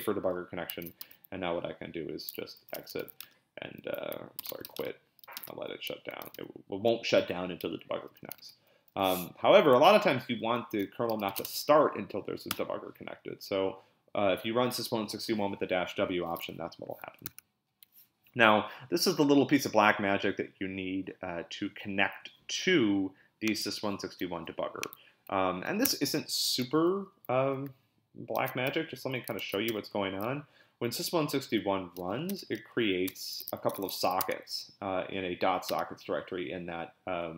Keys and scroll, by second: 0.8 ctrl+b, 1.0 p, 2.3-5.2 typing, 5.4 Return, 6.2 ctrl+b, 6.3 n, 8.4 ctrl+l, 9.3 Up, 9.7 Left, 9.9 Left, 10.0 Left, 10.1 Left, 10.3 Left, 10.4 Left, 10.9-11.8 typing, 12.5 Return, 17.3 super+Tab, 25.8 super+Tab, 28.4 ctrl+x, 28.7 c, 29.4 ctrl+b, 29.7 c, 31.7-34.5 typing, 35.7 Return.